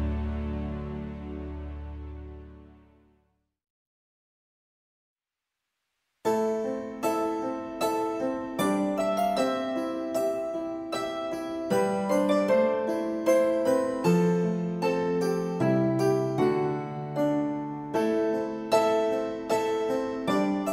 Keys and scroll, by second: 10.6 n.